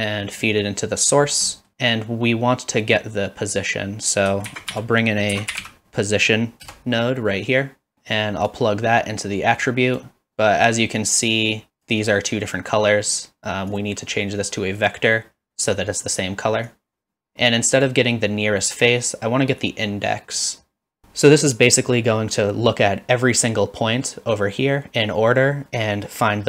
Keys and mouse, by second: 1.7 middle click, 4.5 shift+a, 7.9 middle click, 8.5-10.0 drag, 11.0-11.9 drag, 13.8-14.9 drag, 16.7-17.3 drag, 17.9-20.4 drag.